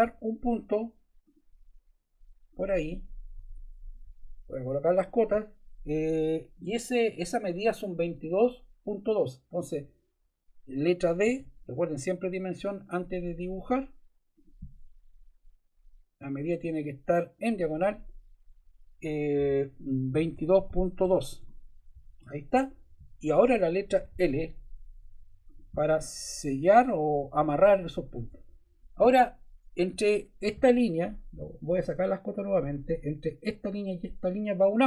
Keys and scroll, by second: 3.3 Escape, 11.2 d, 20.1 2, 20.6 ., 21.0 2, 21.3 Return, 24.0 l, 28.2 Escape.